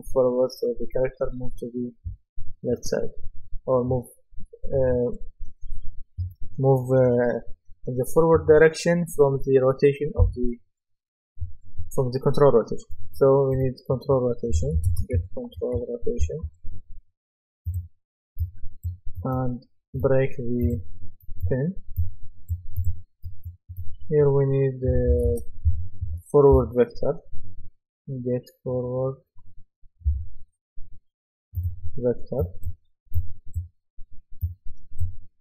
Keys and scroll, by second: 14.3-17.0 typing, 24.6-26.6 typing, 30.1 typing.